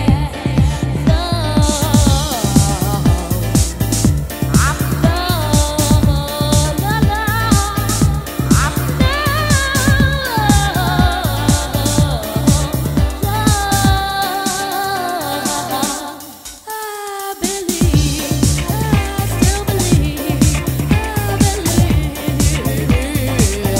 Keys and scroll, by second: 1.4 super+Tab.